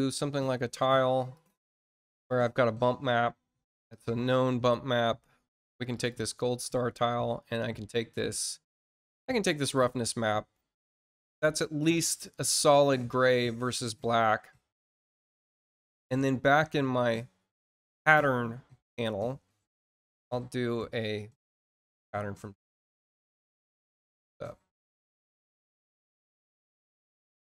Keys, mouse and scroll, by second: 0.2 middle click, 1.3 click, 1.5 click, 3.8 scroll down 2, 5.6 click, 5.9 click, 9.4 click, 9.7 click.